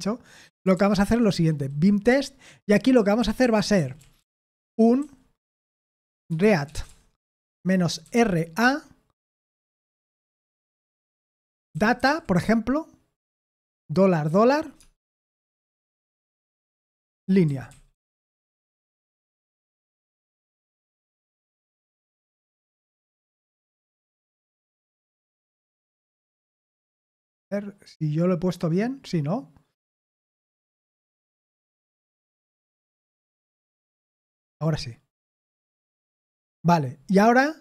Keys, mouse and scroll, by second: 0.7 ctrl+p, 1.3-8.8 typing, 11.4-14.8 typing, 16.0 Escape, 16.5-21.6 typing, 25.6 typing, 32.0-33.7 typing.